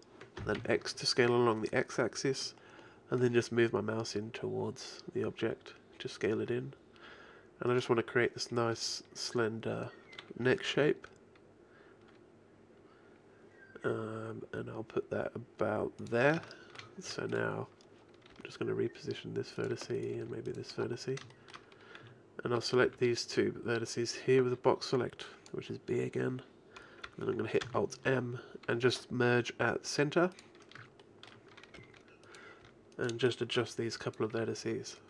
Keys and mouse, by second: 9.5 click, 10.8 g, 16.5-18.3 middle drag, 18.3 right click, 18.3 g, 20.0-22.1 drag, 20.2 g, 21.6 middle click, 22.1 a, 22.9 b, 27.7 alt+m, 31.8 g, 32.7 click, 32.7 g, 33.5 click, 33.5 g, 34.3 a.